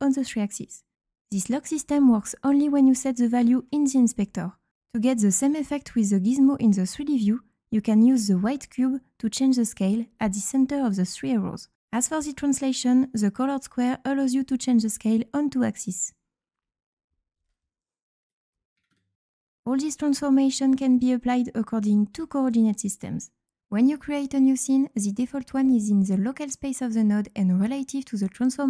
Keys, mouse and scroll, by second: 1.7 click, 2.8 click, 6.9-10.3 drag, 13.6-14.5 drag, 15.0-16.1 drag, 16.5-17.5 drag, 18.2 click, 20.2 click, 21.9 click, 22.5 click, 23.6 click, 25.0 click, 27.6-27.9 scroll up 2, 28.2-28.6 right drag.